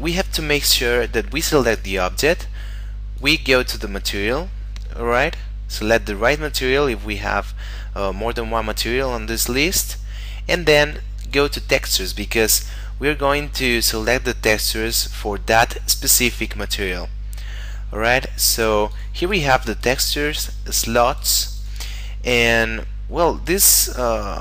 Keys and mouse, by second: 1.6 right click, 3.2 click, 11.2 click, 18.5 click.